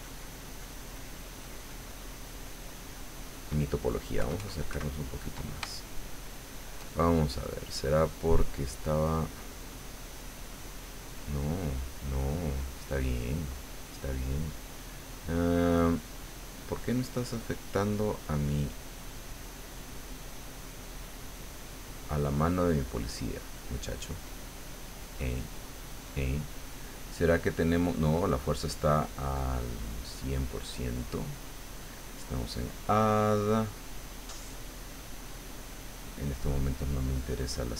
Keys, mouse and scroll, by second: 4.3 KP_Add, 5.7-6.8 shift+middle drag, 7.1-14.3 shift+drag, 17.0-18.0 middle drag, 20.0 click, 22.4-23.5 middle drag, 23.5-24.1 scroll up 1, 24.1-25.2 drag, 30.3-37.7 drag.